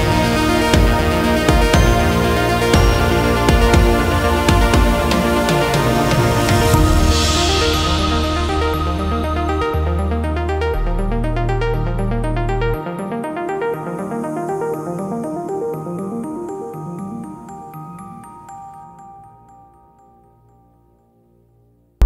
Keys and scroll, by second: 2.6 F2, 3.9 shift+Page_Up, 5.8 Escape, 12.4 space, 15.7 shift+Page_Up, 21.1 c, 21.2 e, 21.5 Escape.